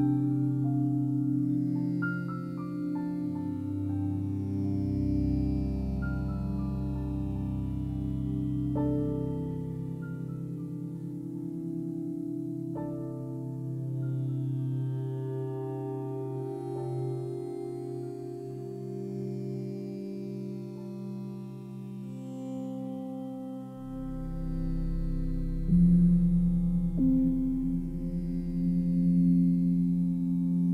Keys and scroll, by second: 1.8 0, 2.1 ., 3.2 6, 4.6 Return, 7.9 1, 8.7 Return, 15.0 2, 15.8 Return, 27.1-28.1 typing.